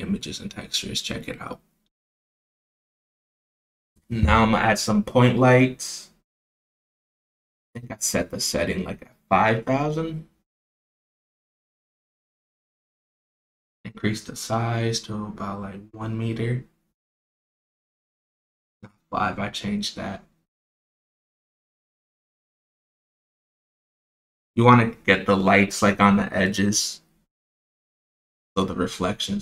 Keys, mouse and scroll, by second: 0.0 click, 1.5 shift+a, 3.1 click, 3.5-5.4 right drag, 6.3 click, 6.9 shift+a, 10.8 click, 11.6 click, 12.6 click, 14.4 click, 15.0 KP_0, 16.9-19.1 drag, 18.3 KP_0, 21.0-21.5 middle drag, 21.7 KP_0, 26.7 g.